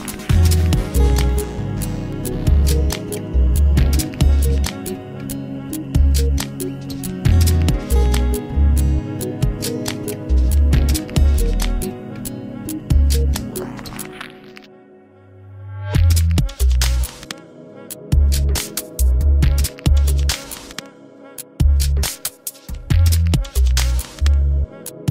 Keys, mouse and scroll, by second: 2.2 Tab, 3.4-3.9 scroll down 2, 3.9-6.9 middle drag, 7.2 Tab, 9.9 click, 10.5 a, 10.6 a, 11.0 a, 14.5 Tab, 15.8-18.9 drag, 18.9-20.0 middle drag, 20.0-20.5 scroll up 2, 20.5-21.8 middle drag, 21.8 scroll up 1, 22.1-22.6 scroll down 2, 22.6-25.1 middle drag.